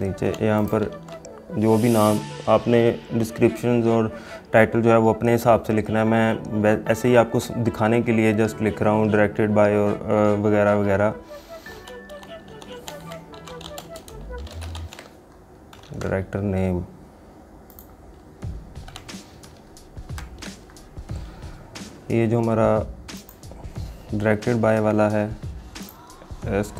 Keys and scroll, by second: 1.1 ctrl+a, 16.0 ctrl+a.